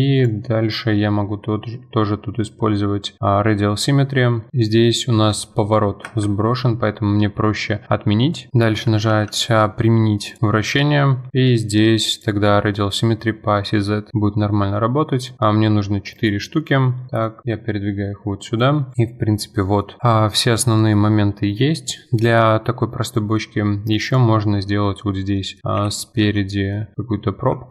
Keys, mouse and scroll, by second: 0.2 click, 4.5-5.2 drag, 9.1 ctrl+a, 12.1-14.8 drag, 17.2 click, 18.0-18.9 middle drag, 18.9 click, 18.9 scroll down 2, 19.0-19.9 middle drag, 19.9 scroll down 1, 20.0-22.2 middle drag, 22.2-22.9 scroll up 3, 23.1-24.1 middle drag, 24.1 click, 25.4-25.8 middle drag, 25.8 KP_7, 26.5-27.7 shift+middle drag.